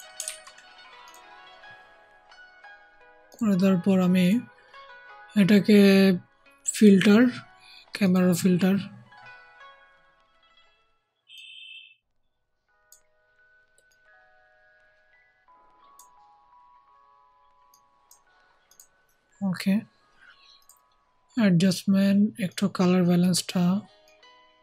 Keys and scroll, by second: 0.2 ctrl+z.